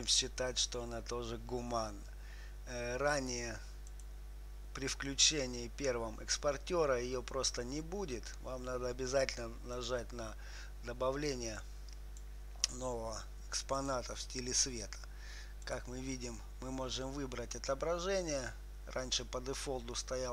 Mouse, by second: 4.3-6.1 drag, 10.2-13.9 drag, 14.2-18.7 drag.